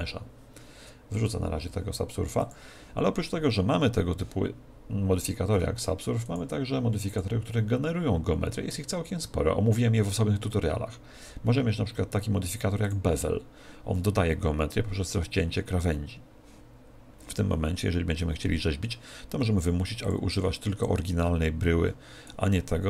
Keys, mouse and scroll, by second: 2.3 click, 6.2-8.9 drag, 20.0-22.6 drag.